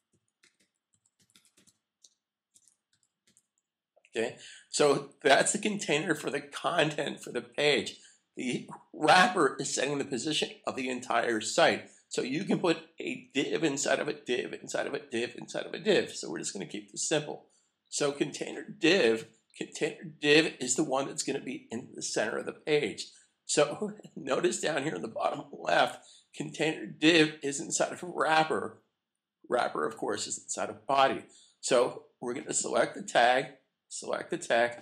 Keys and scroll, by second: 2.6 shift+d.